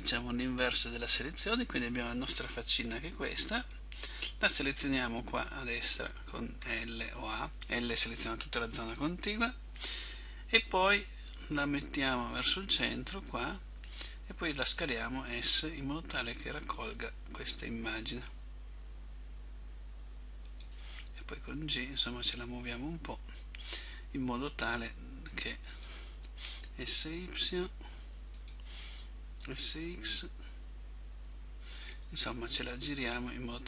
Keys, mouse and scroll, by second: 3.7 right click, 6.7 l, 15.0 s, 21.4 click, 21.4 g, 26.8 s, 29.7 s, 32.7 click, 32.7 g.